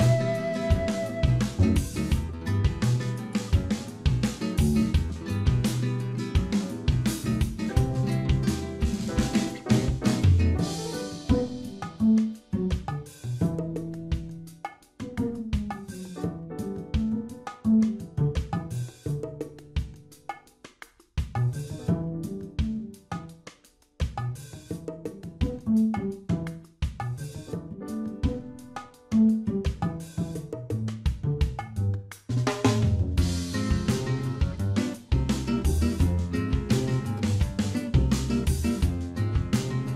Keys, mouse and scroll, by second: 0.2 click, 5.5 middle click, 7.1 scroll down 2, 7.2 Tab, 7.4 middle click, 8.8-9.8 scroll up 3, 9.1 Tab, 10.3 click, 13.3-13.6 scroll down 2, 13.6 Tab, 13.8 middle click, 15.3 shift+middle click, 15.7 middle click, 17.7 Tab, 19.0 ctrl+r, 21.3 ctrl+b, 24.7 click, 26.0 click, 27.9 click, 28.8 click, 30.4 shift+middle click, 30.8 middle click, 31.2 Tab, 31.5 scroll down 1, 31.6 middle click, 34.0 click, 34.4 middle click, 35.5 scroll up 1, 36.1 Tab, 37.0 KP_Divide, 37.7 middle click, 38.2 shift+middle click, 38.5 scroll up 5, 39.9 click.